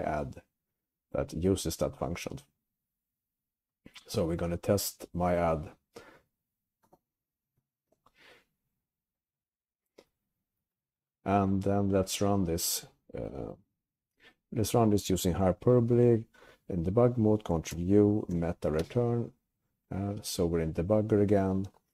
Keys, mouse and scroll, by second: 9.4 Down, 9.8 Down, 10.3 Up, 10.7 Left, 10.9 Left, 11.2 Left, 11.4 Left, 11.6 Left, 11.9 Left, 17.8 ctrl+u, 19.4 alt+Return.